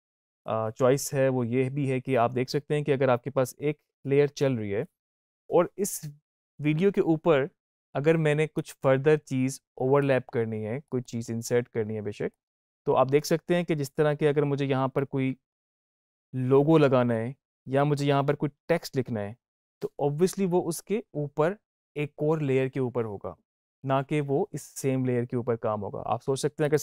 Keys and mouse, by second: 3.7 click, 8.4-10.7 drag, 14.8-26.4 drag, 26.5 click.